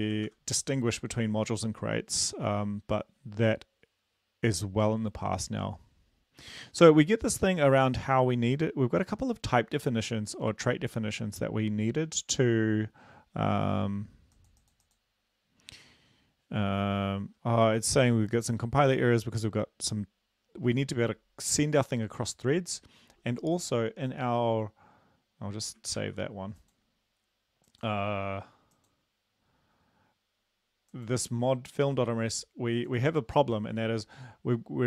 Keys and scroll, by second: 0.3 ctrl+v, 0.8 ctrl+s, 26.0 ctrl+s.